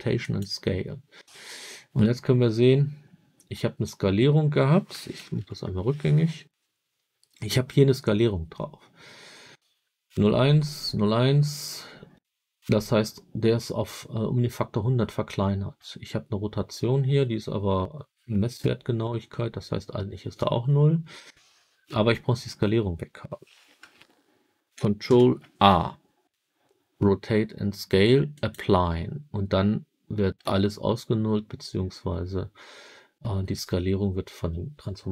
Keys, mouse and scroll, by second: 5.3 ctrl+z, 25.0 ctrl+a.